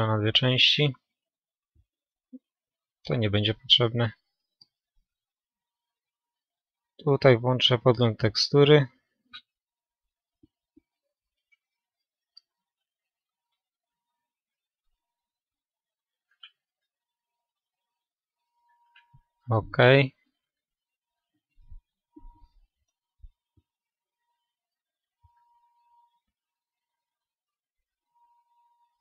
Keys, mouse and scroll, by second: 2.7 t, 10.2 n, 17.3-20.0 drag, 18.8-19.4 scroll up 1, 19.4-23.7 middle drag, 23.7-24.1 scroll down 1, 24.1-27.8 middle drag, 25.2 n, 27.8 KP_7, 27.9 middle click, 28.1-29.0 middle drag.